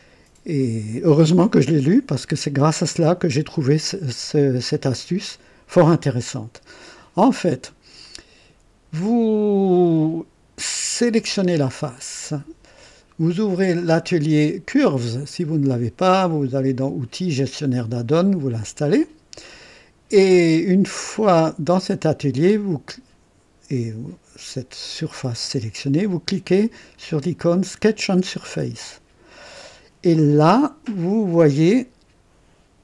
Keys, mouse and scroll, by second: 11.1 click, 14.9 click, 16.3 click, 19.0 click, 28.3 click, 31.6 click.